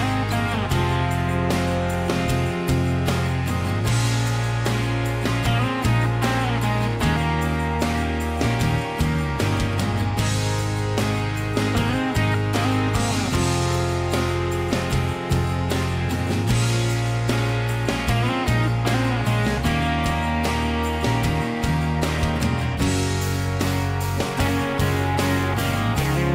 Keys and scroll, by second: 9.6-10.8 typing.